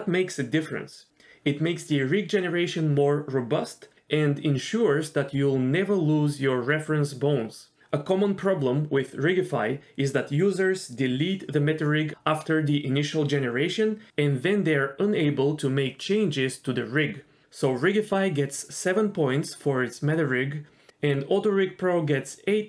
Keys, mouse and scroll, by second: 3.2 click, 3.3 g, 5.2 g, 6.3 scroll down 2, 6.4 shift+middle click, 6.5-6.9 scroll up 1, 6.9 click, 7.0 g, 7.8 click, 7.8 g, 9.0-9.8 scroll down 1, 18.1 middle click, 18.2 Tab, 18.4 Tab, 18.7 click.